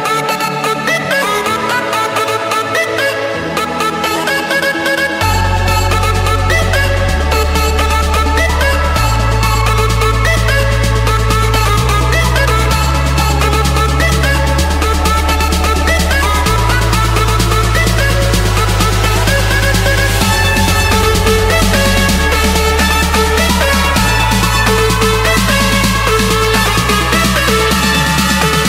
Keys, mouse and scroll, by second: 0.6 click, 1.7 click, 2.6 click, 2.8 Escape, 3.8 click, 6.1-8.4 typing, 7.5 Return, 8.5 Escape, 9.9 click, 10.2 right click, 11.6 click, 12.9 click, 13.9 middle click, 14.4 middle click, 14.5 middle click, 14.6-16.8 scroll, 16.8 Escape, 17.5-18.0 typing, 18.5 Return, 19.9 typing, 20.4 Return, 22.1-23.2 drag, 23.4-24.5 drag, 27.7-28.4 typing.